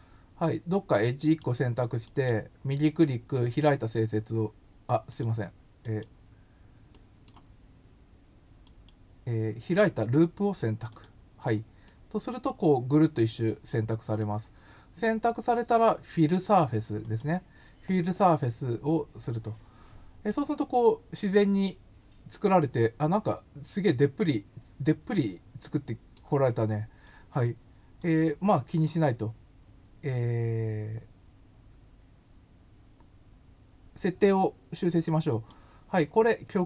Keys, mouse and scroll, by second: 2.1 right click, 3.5 click, 5.0 click, 6.9 middle click, 8.7 right click, 10.9 click, 11.8-14.1 middle drag, 17.0 click, 20.2-21.6 middle drag, 35.2 click.